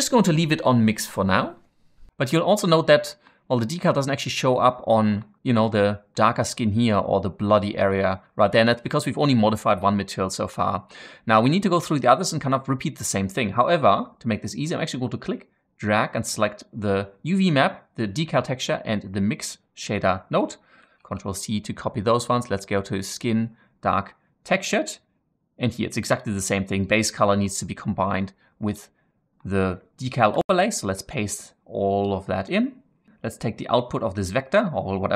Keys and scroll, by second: 20.8 ctrl+c, 30.3 ctrl+v.